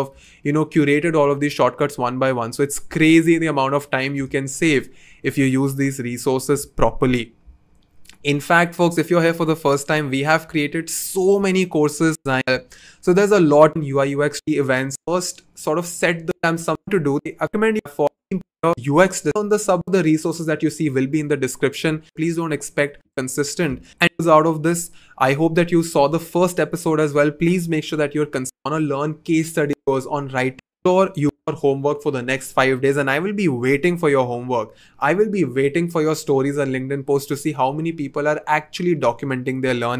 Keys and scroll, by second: 7.0 n, 31.4 2.